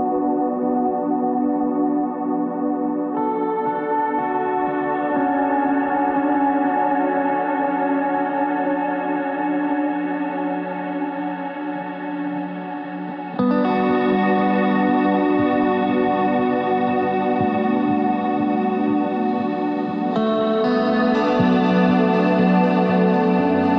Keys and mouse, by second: 1.4 f, 1.9 f, 2.5 f, 2.8 z, 4.0 alt+m, 4.7 z, 6.3 ctrl+Tab, 7.1-8.3 drag, 11.0 w, 11.6 click, 12.6 Tab, 17.5 KP_3, 18.0 Tab, 18.5 ctrl+Tab, 19.3 z, 19.6 c, 21.5 click, 21.5 s, 23.6 z.